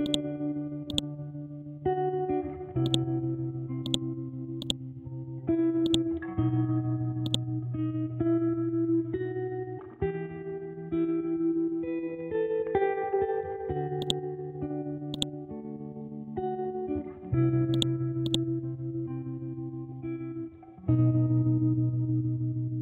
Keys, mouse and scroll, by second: 7.9-8.8 scroll down 1, 8.8-10.5 scroll up 1, 10.5 scroll down 1, 11.0-11.3 scroll up 1, 14.0 click, 15.6-16.4 scroll down 1, 16.4 scroll up 1, 17.7 click, 18.7-20.5 scroll up 1, 20.9-21.8 typing.